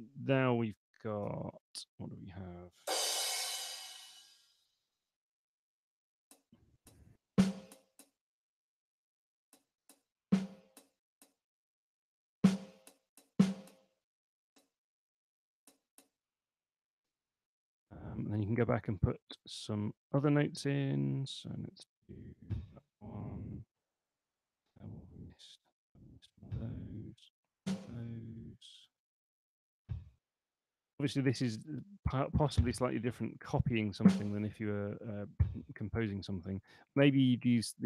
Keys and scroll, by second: 1.4 6, 3.6 5, 8.6 space, 15.3 space, 18.2 super+Left, 19.4 super+Right, 21.5 6, 24.3 Right, 25.6 5, 28.3 Right.